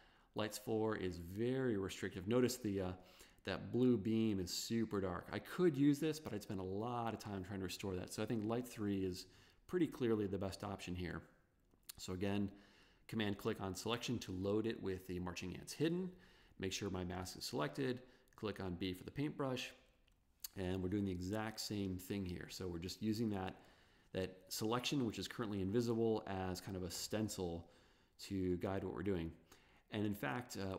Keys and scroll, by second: 2.2 v, 18.4 b, 19.6 ].